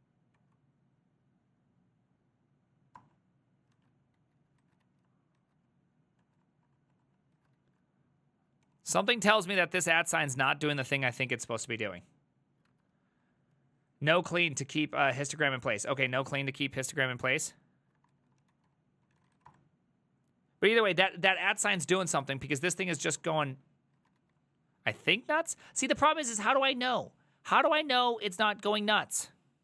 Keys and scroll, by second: 0.4 Up, 3.0 Return, 3.8 ctrl+a, 4.2 2, 4.6 ctrl+a, 4.9 3, 5.4 ctrl+a, 6.2 Return, 6.5 Return, 6.8 Return, 7.1 Return, 7.4 ctrl+a, 7.6 ctrl+a, 8.7 ctrl+c, 8.8 ctrl+c, 9.0 ctrl+c, 9.2 Up, 9.6 ctrl+Left, 9.7 ctrl+Left, 9.9 ctrl+Left, 10.1 ctrl+Left, 10.2 ctrl+Left, 10.4 ctrl+Left, 10.6 ctrl+Left, 11.6 @, 16.2 alt+{, 16.8 ctrl+Right, 17.0 ctrl+Right, 17.6 ctrl+Right, 17.9-19.9 typing, 21.6 ctrl+a, 21.7-23.0 typing, 23.0 Return, 24.0 ctrl+a, 24.2 ctrl+a.